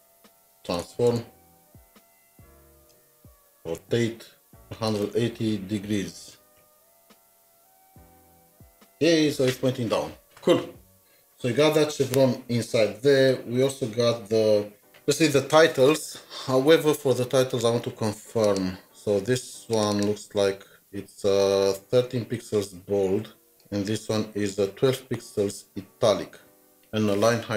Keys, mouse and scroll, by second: 1.1 typing, 2.9 Return, 3.5-7.1 typing, 4.5 Return, 19.9 typing, 19.9 double click, 23.5 double click.